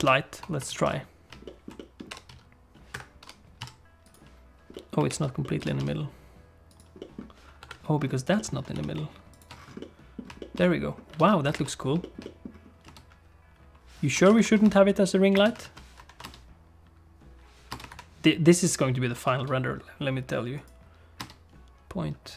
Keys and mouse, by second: 0.0 ctrl+space, 1.4 alt+shift+middle click, 1.7 alt+shift+middle click, 2.1 g, 3.2 alt+shift+g, 4.7 click, 5.1 alt+g, 5.4-6.8 drag, 5.6 g, 7.0 click, 7.6 KP_7, 8.3 shift+middle click, 8.7 g, 9.8 middle click, 10.4 shift+middle click, 10.6 middle click, 11.2 alt+a, 11.5 ctrl+s, 12.0 shift+click, 12.2 middle click, 12.8 space, 14.1 space, 14.6 space, 15.3 space, 16.0 shift+Left, 16.2 space, 17.7 space, 17.9 shift+Left, 19.3 ctrl+s, 20.5 click, 21.2 space.